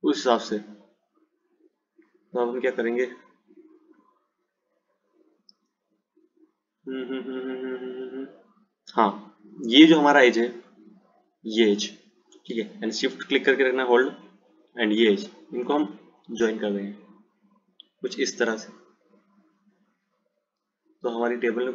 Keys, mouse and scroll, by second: 11.4 click, 14.4 shift+click, 15.9 f, 17.2 click, 19.3 click.